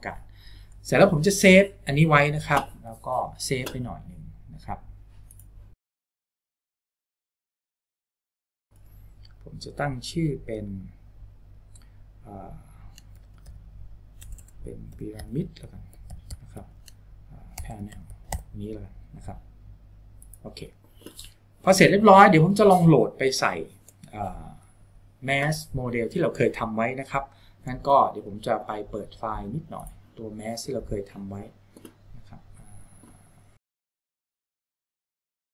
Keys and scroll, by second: 13.5-19.0 typing.